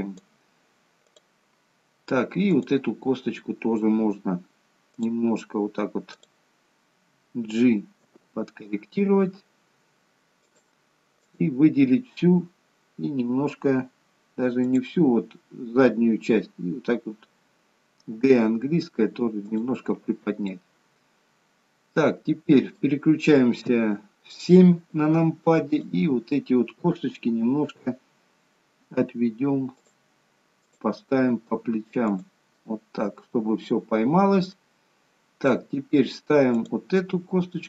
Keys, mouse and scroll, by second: 1.2 click, 2.5 click, 4.9 click, 6.1 click, 8.0 g, 11.3 click, 14.6 click, 20.6 middle click, 23.6 KP_7, 25.7 click, 30.7 click, 30.7 g, 31.4 g, 34.7 middle click, 36.6 click, 37.2 g.